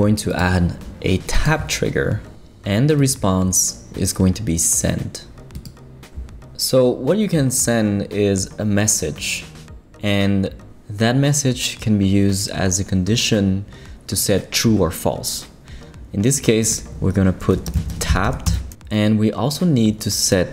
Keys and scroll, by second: 17.4-18.7 typing.